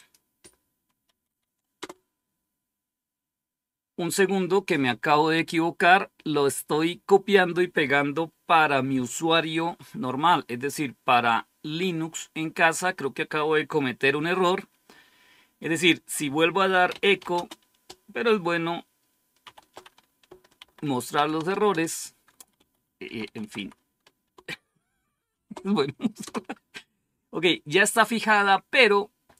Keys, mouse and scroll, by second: 1.0 Right, 1.7 Return, 16.2-17.6 typing, 19.3 typing, 20.5-21.8 typing, 22.5 Up, 23.0 Left, 23.2 Left, 23.3 Left, 23.5 Left, 25.2-26.6 typing, 25.5 Delete.